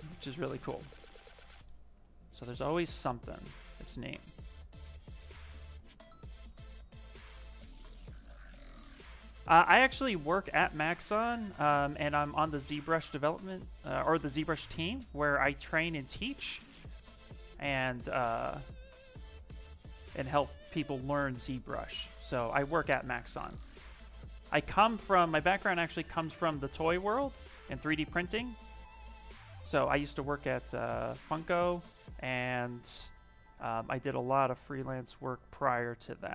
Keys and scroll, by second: 12.0 s, 35.0 s.